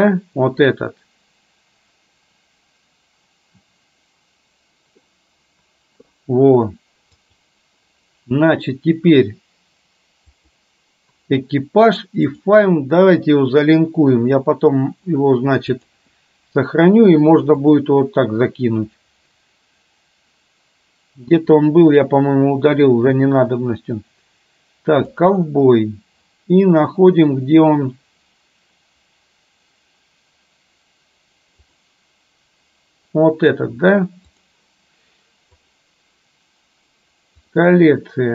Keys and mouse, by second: 7.4-10.8 drag, 12.4-16.2 drag.